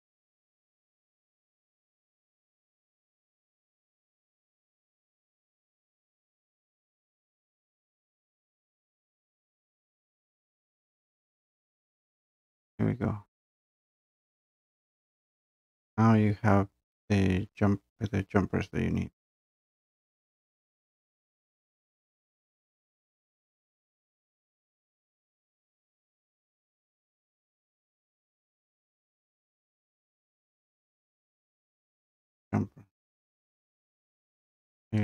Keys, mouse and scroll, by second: 2.8 click, 5.1 click, 6.7 click, 8.1 click, 10.1 click, 11.0 click, 14.9 click, 19.6 scroll, 19.7 scroll down 2, 19.8 scroll down 1, 19.9 scroll, 20.0 scroll up 2, 20.1 scroll down 1, 20.3 scroll, 20.4 click, 20.6 Escape, 23.0 click, 23.9 click, 24.2 Delete, 24.6 click, 24.7 Delete, 25.2 click, 25.3 click, 25.4 click, 26.3 click, 26.6 click, 26.8 click, 26.9 click, 27.7 click, 28.5 scroll down 2, 28.6-29.8 scroll, 30.2-30.6 scroll, 31.3 scroll down 1, 32.5 click, 32.5 scroll.